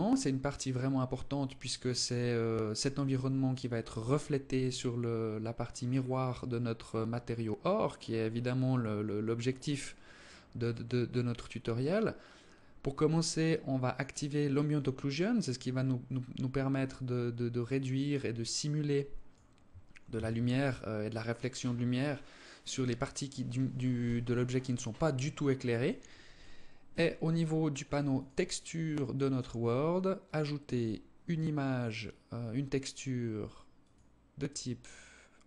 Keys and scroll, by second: 19.5 ctrl+s.